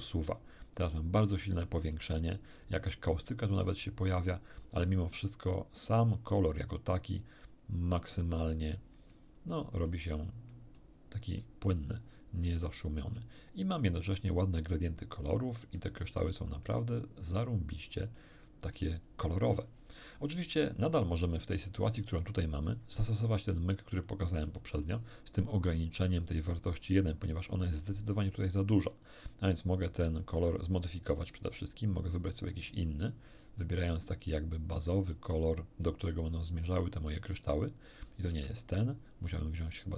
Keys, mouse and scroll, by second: 1.4 shift+middle click, 7.8-8.5 scroll down 4, 9.1 middle click, 9.8 middle click, 10.5 middle click, 11.4 middle click, 12.0 scroll down 1, 12.6 shift+middle click, 15.8 middle click, 16.6-18.4 middle drag, 18.8 middle click, 19.2 scroll down 1, 24.2 scroll down 1, 24.6 shift+middle click, 28.2 click, 29.6 click, 31.1 click, 32.5-38.8 drag, 38.8 Escape.